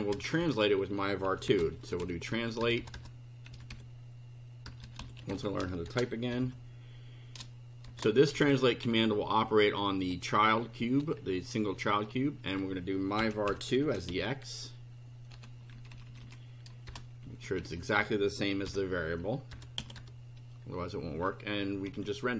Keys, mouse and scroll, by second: 0.1 Return, 0.4 Up, 1.0-9.4 typing, 13.0-15.7 typing, 17.2 shift+Right, 18.7-20.5 typing, 21.8 F5.